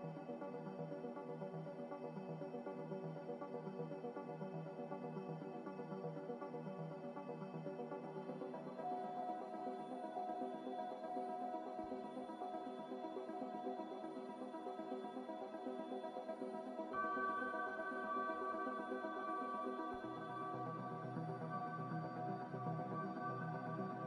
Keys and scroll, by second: 0.0 a, 2.5 r, 3.0 a, 5.3 g, 7.9 Escape, 8.0 Escape, 11.1 Escape, 11.1 a, 14.1 ctrl+c, 14.6 ctrl+v, 16.0 g, 17.4-18.8 typing, 19.0 Return, 22.0-22.7 typing, 23.5 Delete.